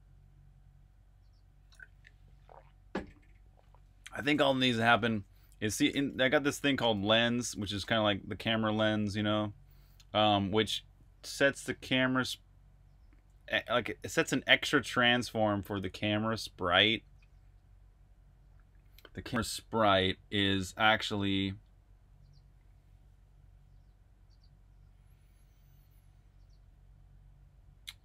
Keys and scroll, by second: 4.6-7.6 typing, 8.8-11.9 typing, 13.0 typing.